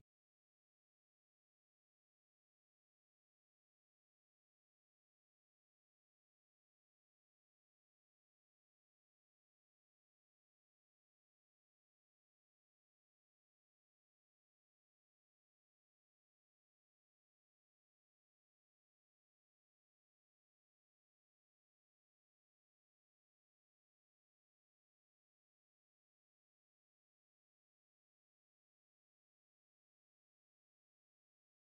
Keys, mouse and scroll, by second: 0.8 KP_1, 1.6 shift+scroll up 1, 1.8 shift+middle click, 2.9 g, 4.6-5.0 scroll up 1, 5.1 z, 5.6 middle click, 6.2-6.7 shift+middle drag, 7.1 g, 9.8-10.2 middle drag, 12.2 shift+click, 14.1 g, 16.0-17.2 middle drag, 17.4 middle click, 18.7 middle click, 20.1-20.6 middle drag, 21.0 shift+middle drag, 21.5-21.8 drag, 22.3 r, 24.7 middle click, 25.1 shift+middle click, 25.9 shift+middle click, 26.7 KP_7, 27.4-27.7 shift+middle drag, 27.7 shift+z, 28.2 z, 29.1 g, 31.1 KP_3.